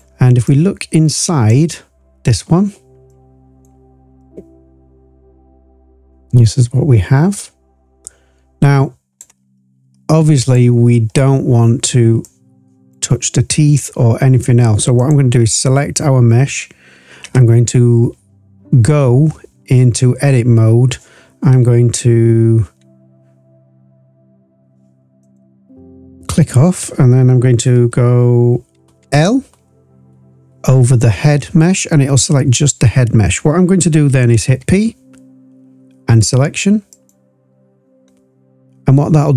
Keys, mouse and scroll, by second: 0.4-1.4 drag, 1.7-2.4 scroll up 2, 2.4-3.0 scroll up 4, 3.1-3.6 drag, 4.1-9.1 drag, 9.4-10.3 scroll down 2, 10.3 click, 10.9-12.2 scroll up 2, 12.2 click, 14.9 click, 17.8 Tab, 25.2 click, 29.2 l, 34.5 p.